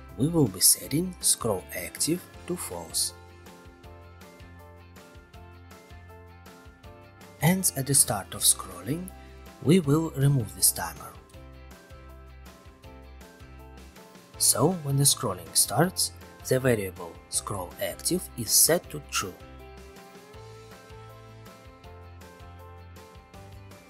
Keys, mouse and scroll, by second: 1.0 ctrl+click, 1.5 ctrl+c, 1.8 ctrl+v, 4.1 click, 5.0 click, 5.8 click, 7.3 click, 10.6 click, 11.9 click, 12.3 ctrl+c, 13.1 click, 13.3 ctrl+v, 13.6 click.